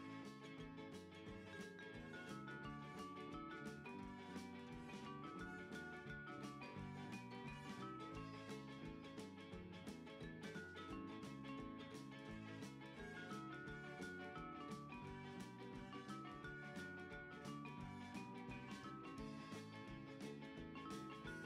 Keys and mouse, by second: 1.3 click, 2.9 shift+d, 3.3 z, 5.0 click, 5.4 g, 7.0 r, 8.6 click, 9.0 g, 9.2 y, 10.9 click, 11.2 r, 11.7 click, 11.9 g, 13.4 click, 14.6 click, 15.2 shift+d, 15.6 z, 17.0 click, 17.4 r, 19.0 click, 19.3 g, 20.8 click, 21.0 r.